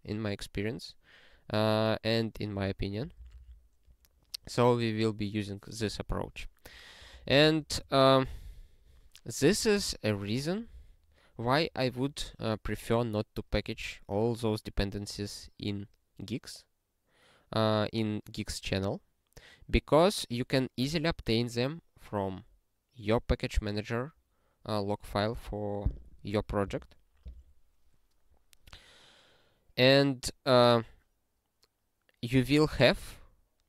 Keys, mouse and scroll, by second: 3.0 ctrl+n, 3.2 ctrl+n, 3.3 ctrl+n, 3.4 ctrl+n, 7.1 ctrl+n, 7.3 ctrl+n, 7.4 ctrl+n, 7.8 click.